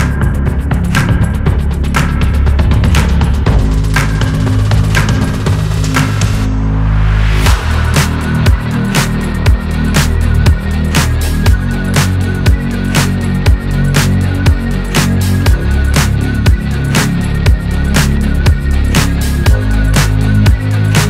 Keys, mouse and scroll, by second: 0.7 ctrl+r, 2.9 Tab, 3.0 scroll down 4, 3.2 middle click, 4.3 shift+middle click, 4.9 scroll up 6, 5.2-7.2 middle drag, 7.2 KP_1, 7.7 Tab, 8.2-9.1 scroll up 4, 9.1 ctrl+r, 12.1 ctrl+z, 12.7-13.9 scroll down 9, 13.6 Tab, 14.2 click, 14.5-17.4 shift+middle drag, 17.4 scroll up 3, 17.9 click, 18.9 click, 19.7 click, 19.9 scroll down 1.